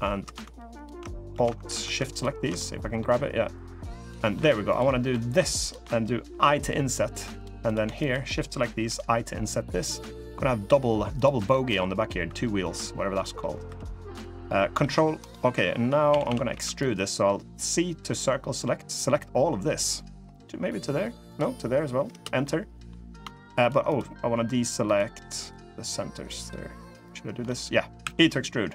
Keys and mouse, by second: 0.5 alt+shift+click, 1.9 alt+shift+click, 2.3 middle click, 3.3 click, 4.0 middle click, 4.1 3, 4.4 click, 4.8 middle click, 6.0 i, 7.8 shift+click, 8.6 i, 11.2 middle click, 12.8 middle click, 13.4 3, 14.5 ctrl+r, 15.8 a, 16.0 a, 16.2 c, 22.1 middle click, 23.3 shift+click, 24.6 shift+click, 25.1 shift+click, 27.2 middle click, 27.7 e.